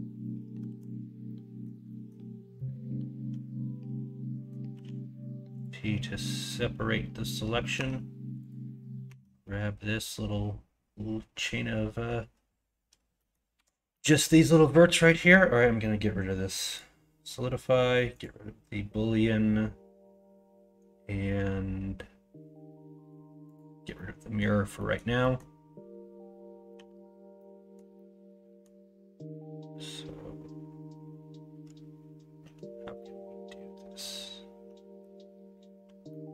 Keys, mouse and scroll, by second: 0.6 alt+z, 1.3 middle click, 1.9 middle click, 2.6-4.5 middle drag, 4.7 p, 7.7 Tab, 9.0 Tab, 13.1 middle click, 13.5 1, 14.8 middle click, 23.9 middle click, 24.7 middle click, 25.2 middle click, 26.7 l, 27.3 middle click, 28.0 middle click, 32.9-35.0 middle drag, 36.2 middle click.